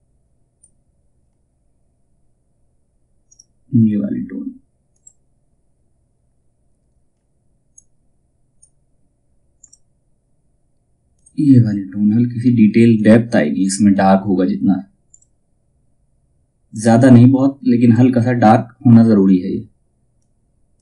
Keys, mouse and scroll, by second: 2.8 click, 7.3-20.8 drag, 14.6 typing.